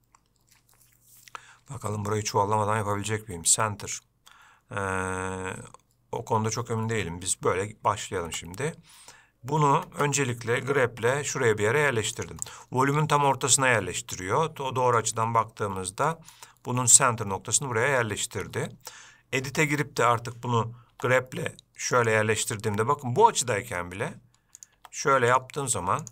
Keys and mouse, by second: 8.6 Tab, 11.3 g, 12.8-15.3 middle drag, 15.7-16.6 middle drag, 19.7 Tab, 21.2 g, 22.9 middle click, 24.9 click, 25.1 g.